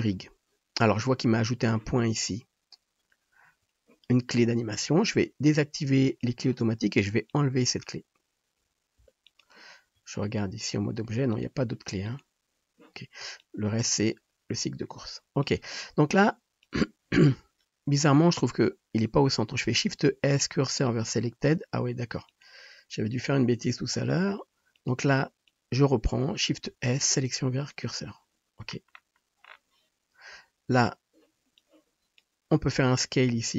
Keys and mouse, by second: 6.0 click, 7.3-11.5 drag, 8.9 x, 9.8 Tab, 11.5-12.0 middle drag, 12.0 click, 12.2-13.2 middle drag, 13.5-16.7 drag, 18.2 drag, 19.9 shift+s, 22.3 click, 24.2 Tab, 25.5-33.5 drag, 26.5 shift+s, 33.3 s.